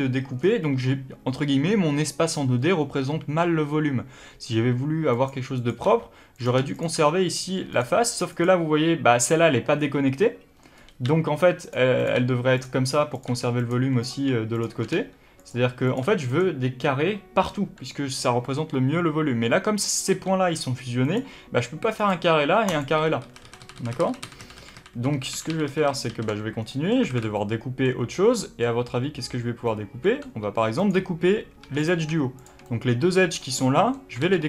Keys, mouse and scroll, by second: 0.3-2.9 scroll down 1, 2.9 g, 5.5 click, 5.8 g, 6.6 shift+click, 6.9 g, 8.2 click, 10.7 scroll up 1, 10.9 g, 11.9 click, 12.1 g, 13.0 click, 13.2 g, 13.9 click, 14.4 shift+click, 14.8 g, 15.8 click, 15.9 g, 19.8 click, 20.0 g, 21.1 click, 21.9 click, 22.6 click, 23.1 ctrl+z, 26.5 scroll down 1, 26.6-30.7 middle drag, 27.0 alt+a, 30.3 3, 30.7 click, 31.5 2, 31.7 click, 32.3 shift+click, 32.6-34.4 middle drag, 34.1 ctrl+e.